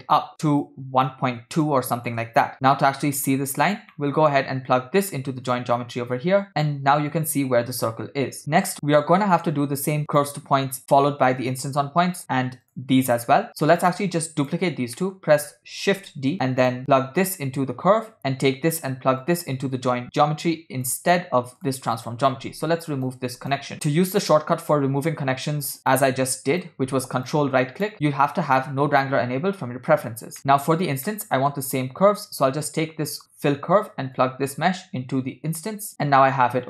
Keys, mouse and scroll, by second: 0.7 shift+click, 1.7 shift+click, 2.7 scroll down 3, 3.1-3.9 scroll down 5, 4.0-4.4 middle drag, 5.5-6.5 drag, 8.4 click, 8.8 middle click, 8.8-9.5 scroll down 2, 10.1 click, 11.4 shift+click, 12.7 shift+click, 13.1 shift+drag, 13.7 click, 14.4 shift+click, 15.1 middle click, 16.1 shift+d, 16.8-18.2 drag, 18.2 middle drag, 19.2-21.0 drag, 21.6 click, 23.2 ctrl+right click, 23.7 click, 23.7 middle click, 24.8-26.8 drag, 27.4 ctrl+right click, 28.8 scroll down 1, 29.7 scroll down 1, 30.4 click, 30.4 middle click, 31.2 middle click, 32.7 click, 34.2-35.9 drag.